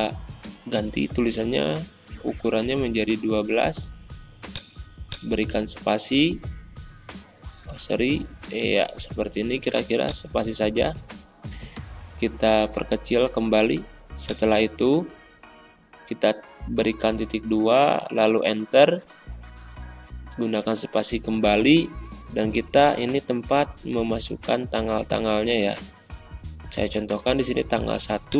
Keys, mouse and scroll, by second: 0.7-1.5 typing, 4.5 click, 6.2 Tab, 7.5 BackSpace, 7.8 space, 10.0-12.0 drag, 12.0 ctrl+[, 14.2 click.